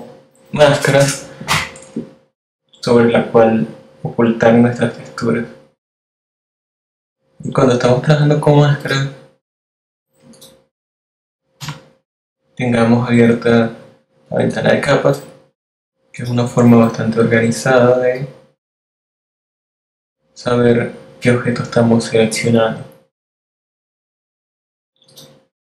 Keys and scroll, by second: 10.6 F7, 25.2 super+c.